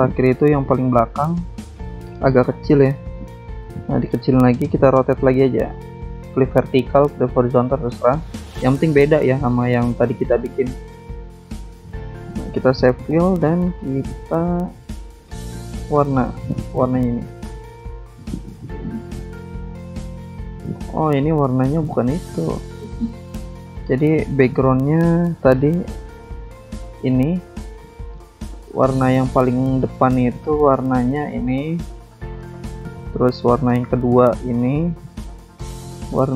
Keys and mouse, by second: 0.1 alt+Tab, 1.2 click, 1.5 ctrl+c, 1.8 ctrl+v, 3.3 ctrl+click, 4.4 click, 5.6 click, 7.2 click, 7.8 click, 9.8 click, 10.2 shift+click, 11.8 click, 12.4 click, 12.4 double click, 13.2 double click, 14.1 click, 17.2 click, 19.1 ctrl+click, 19.7 alt+Tab, 20.7 alt+Tab, 21.5 click, 22.1 double click, 22.8 alt+Tab, 23.4 alt+Tab, 24.3 click, 25.7 click, 27.1 click, 28.0 click, 29.0 click, 30.2 click, 30.9 click, 32.2 click, 33.3 click, 34.1 click, 35.2 click, 36.1 click.